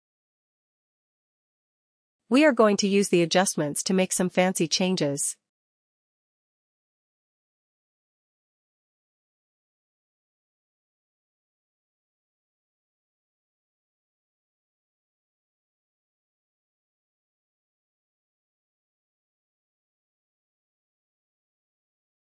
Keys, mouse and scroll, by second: 3.4 click, 7.5 ctrl+-, 7.5 click, 8.9 ctrl+-, 13.7-14.1 ctrl+-, 14.7-20.8 drag, 15.8 ctrl+-, 21.8 click.